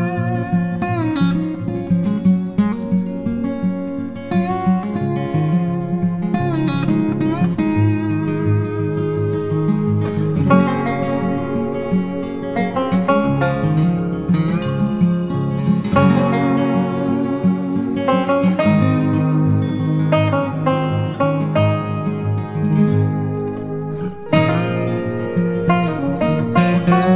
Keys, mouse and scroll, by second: 3.9 typing.